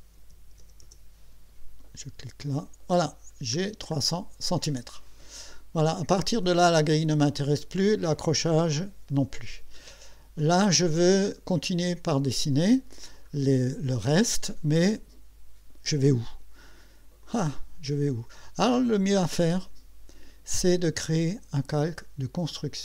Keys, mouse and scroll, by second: 0.6 KP_0, 2.4 click, 3.3-4.0 scroll down 4, 5.1 scroll up 2, 6.9 click, 8.4 click, 9.8-10.6 scroll down 2, 12.6 middle click, 17.2 click, 21.8 click.